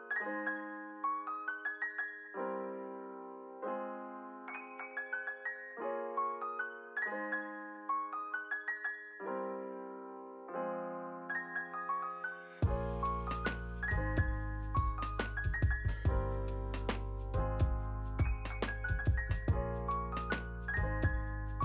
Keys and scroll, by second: 0.2 b, 2.9 ctrl+z, 3.3 n, 3.7 space, 16.6 space, 17.0 ctrl+s.